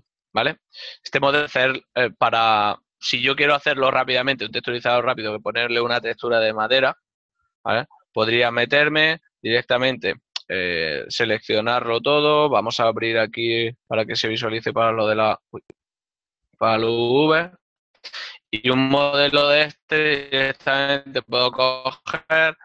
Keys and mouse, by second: 8.5 Tab, 10.7 s, 13.8 click, 18.9 click.